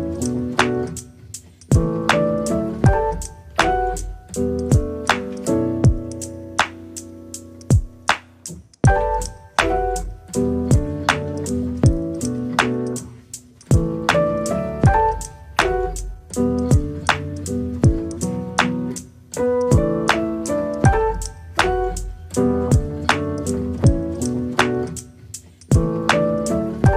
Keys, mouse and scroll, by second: 0.8 middle click, 1.6 click, 2.0-2.7 scroll down 2, 2.7-3.7 drag, 4.7-5.7 drag, 6.5 scroll up 1, 6.7-8.1 middle drag, 8.5 scroll up 1, 8.7-9.9 scroll down 3, 10.1 click, 11.4 KP_0, 12.6-14.0 shift+middle drag, 14.2 KP_0, 14.6-14.9 scroll down 5, 14.9-16.1 middle drag, 16.4 middle click, 17.2 ctrl+s, 17.6-18.0 scroll up 1, 18.0 click, 18.2 click, 18.9 KP_Divide, 19.4-20.6 middle drag, 21.3-22.0 scroll up 7, 22.0 click, 22.9-23.3 scroll down 1, 23.3-24.5 drag, 26.7 click.